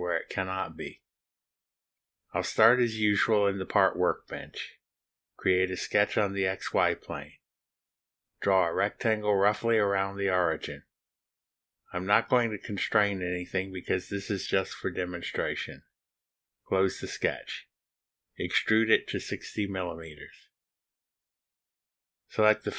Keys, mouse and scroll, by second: 3.3 click, 5.0 click, 7.0 click, 8.8 click, 10.1 click, 12.4 click, 13.9 click, 17.8 click, 19.7 click, 20.9 KP_6, 21.1 KP_0, 21.8 KP_Enter.